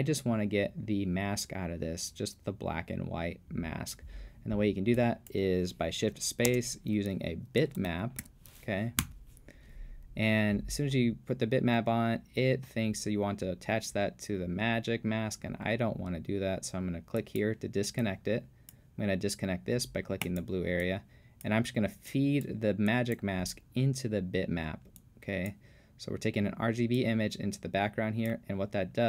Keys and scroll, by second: 6.5 shift+space, 7.6-8.7 typing, 9.0 Return.